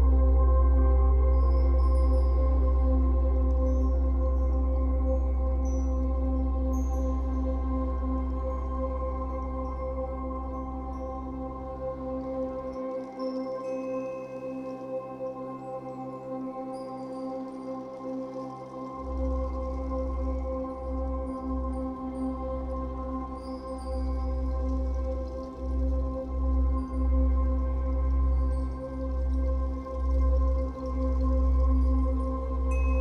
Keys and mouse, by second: 1.5 ctrl+alt+click, 1.8 typing, 2.0-5.4 drag, 5.4 ctrl+s, 6.4-7.3 drag, 7.5 Right, 7.6 Right, 7.8 Right, 8.2 Right, 10.8 i, 12.7-14.8 drag, 15.9 Right, 16.1 Right, 16.2 Right, 16.3 Right, 17.6 Left, 19.5 i, 20.5 click, 22.3 0, 22.5 Return, 23.2 i, 24.3-27.0 typing, 26.0 click, 27.5-28.2 drag, 28.2 typing, 29.3-30.0 typing, 30.2-32.2 ctrl+alt+drag, 31.8 typing.